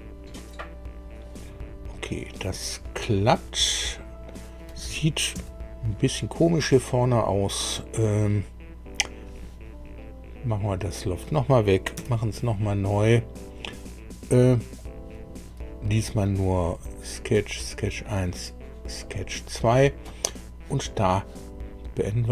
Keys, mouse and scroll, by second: 1.9-4.4 middle drag, 5.3 KP_1, 11.0 click, 11.9 Delete, 14.8 click, 16.6 click, 17.3 click, 19.0 click.